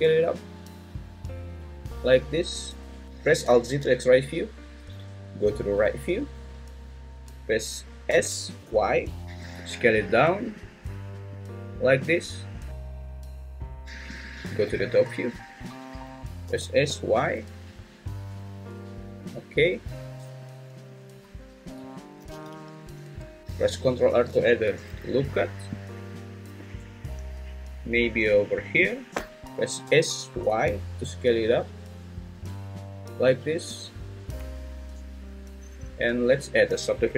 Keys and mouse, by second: 1.9 click, 3.0 alt+z, 3.0 `, 3.7 alt+z, 4.8 `, 8.1 s, 8.6 y, 16.4 s, 16.9 y, 18.7 click, 21.7 `, 22.3 alt+z, 23.0 `, 23.4 Escape, 23.4 g, 23.4 z, 24.1 ctrl+r, 28.8 click, 29.8 s, 30.4 y, 33.7 click.